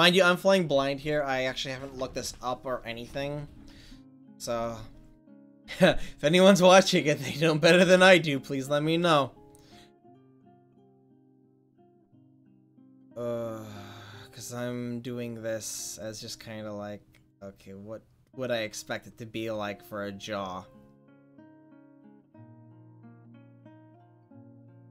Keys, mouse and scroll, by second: 5.3 right click, 5.9 middle click, 6.1 middle click, 7.8 w, 8.4 click, 14.2-16.0 right drag, 16.0 click, 16.3 middle click, 16.5-18.7 drag, 20.9 middle click, 24.8 middle click.